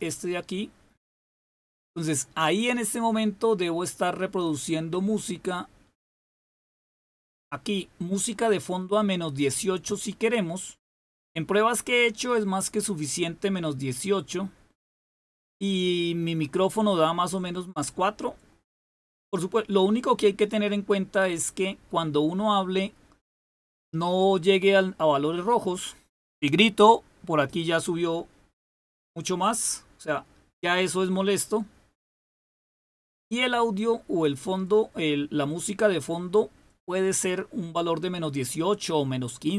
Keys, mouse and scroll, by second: 6.4 click, 6.9 click.